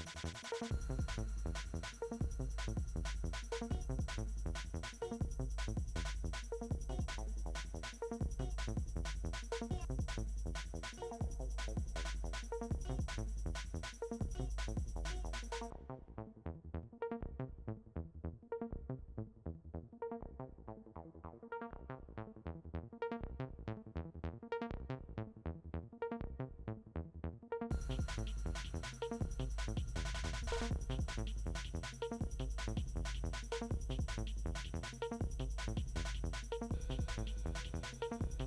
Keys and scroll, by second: 34.0 s.